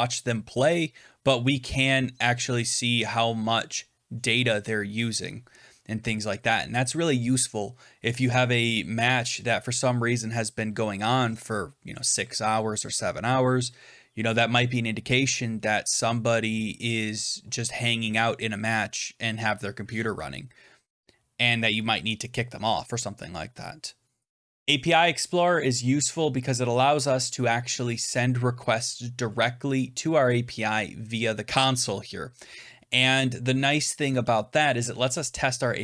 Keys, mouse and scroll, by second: 24.5 click.